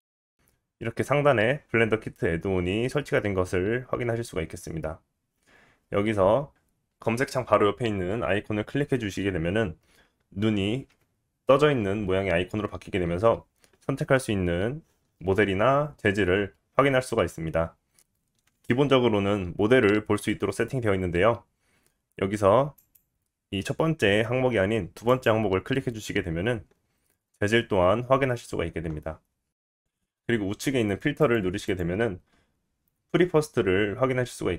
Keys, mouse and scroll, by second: 1.8-16.9 drag, 17.6-28.1 drag, 29.9 click.